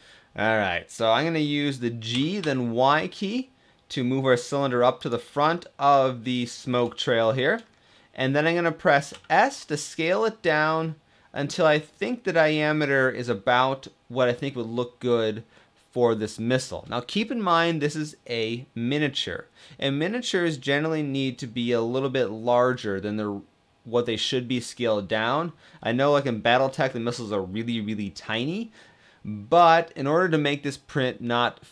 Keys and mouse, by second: 1.8 g, 2.0 y, 5.3-6.0 middle drag, 8.8 s.